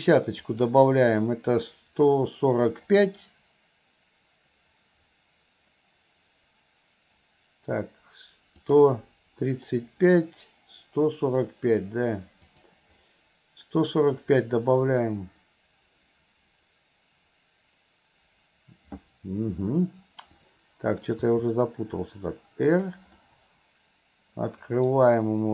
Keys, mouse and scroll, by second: 0.6 click, 8.7 click, 12.6 click, 21.2 r, 23.2-24.9 middle drag, 24.9-25.5 scroll down 1.